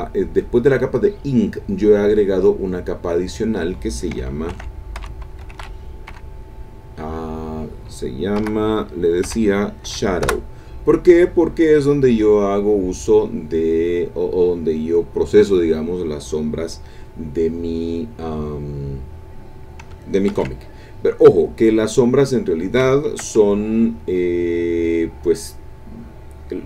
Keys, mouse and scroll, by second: 0.8 click, 2.4 click, 3.2 click, 4.2-6.1 typing, 8.4 BackSpace, 9.2 o, 9.8 w, 10.8 Return, 12.0-14.7 drag, 20.3 ctrl+w, 21.3 click, 24.8 click.